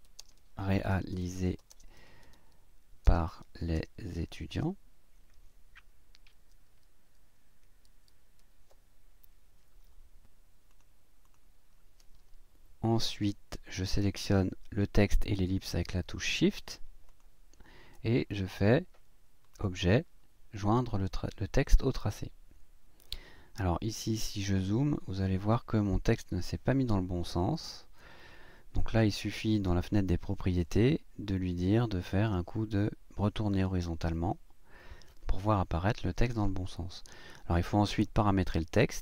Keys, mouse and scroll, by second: 0.0-3.7 typing, 5.4-8.4 typing, 10.7 click, 11.3 click, 17.1 shift+click, 19.5 click, 21.8 click, 24.1-24.4 ctrl+scroll up 2, 24.9-26.0 ctrl+scroll down 3, 26.2-27.5 scroll up 1, 27.5-29.6 drag, 34.1 click, 37.9 click.